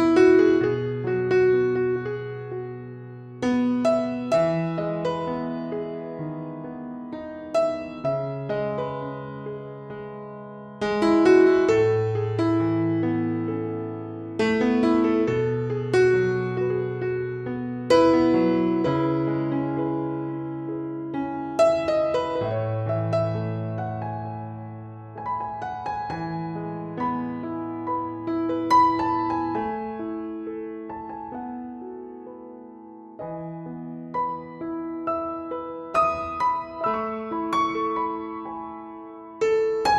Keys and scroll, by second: 4.4 ctrl+c, 7.9 ctrl+v, 8.8 ctrl+a, 15.8 Caps_Lock, 30.0-31.6 typing.